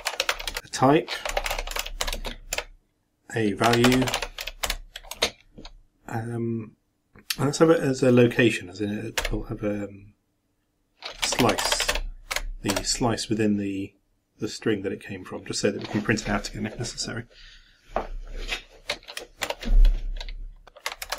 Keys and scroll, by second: 0.0-1.1 typing, 19.4 shift+0, 21.0 ctrl+m.